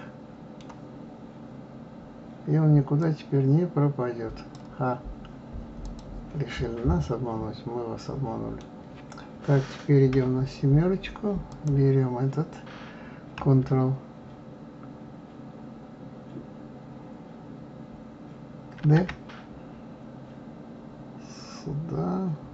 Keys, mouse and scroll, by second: 3.0-5.9 drag, 6.5-9.5 middle drag, 10.1 KP_7, 11.5 click, 18.8 shift+d.